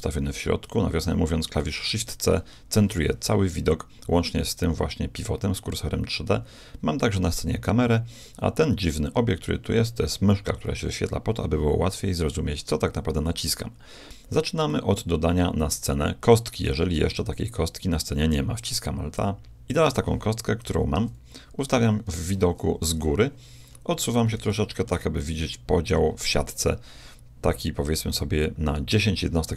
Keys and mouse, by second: 1.7 shift+c, 13.3 middle click, 14.7-16.3 middle drag, 17.0 shift+a, 21.0 KP_1, 22.1 KP_7, 23.7-24.8 middle drag.